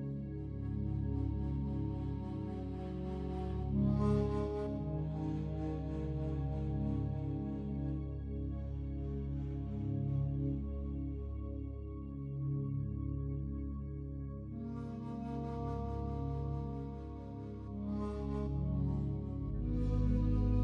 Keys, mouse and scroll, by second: 7.3 click.